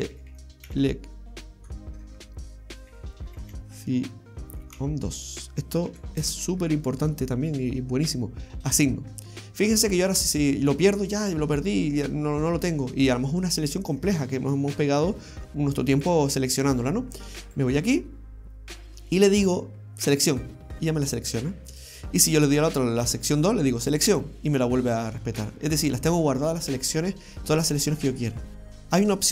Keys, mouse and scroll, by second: 0.3 e, 0.8 c, 1.9 BackSpace, 2.0 BackSpace, 3.5 c, 8.7 click, 10.3 right click, 11.2-12.3 scroll down 2, 16.1-16.5 scroll up 1, 16.5-17.5 scroll down 1, 17.5 click, 20.3 click, 21.8 right click, 22.5 click, 24.0 click, 25.3 scroll down 2, 26.5 scroll down 2, 26.8 middle click, 28.5 shift+middle click, 28.5 right click, 28.5 scroll down 1.